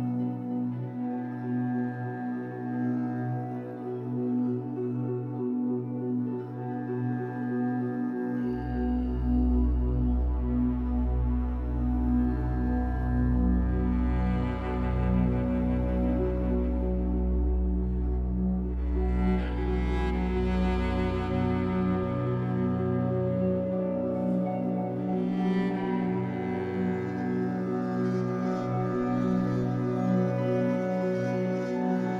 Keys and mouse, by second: 0.0 click, 1.4 click, 1.9 click, 3.1 click, 5.4 click, 6.4 click, 8.9 click, 11.0 click, 11.2 click, 13.9 click, 14.7 click, 14.9 click, 16.0 Tab, 16.6-18.3 typing, 20.6 Return, 21.9 click, 23.6 click, 23.9 click, 24.9 ctrl+s, 25.5 click, 26.6 click, 29.5 F12.